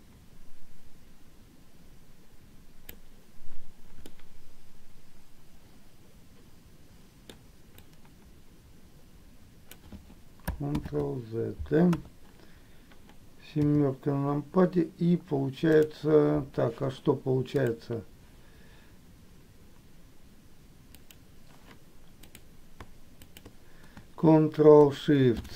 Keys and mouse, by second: 4.2-7.4 middle drag, 8.0-9.9 drag, 11.0 ctrl+z, 12.1 KP_1, 21.1 click.